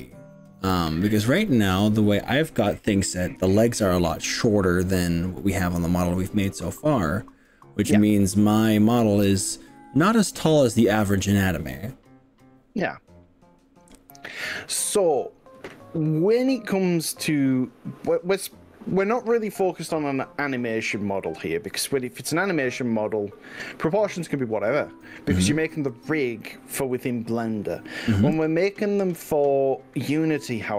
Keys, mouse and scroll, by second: 21.3-28.5 middle drag.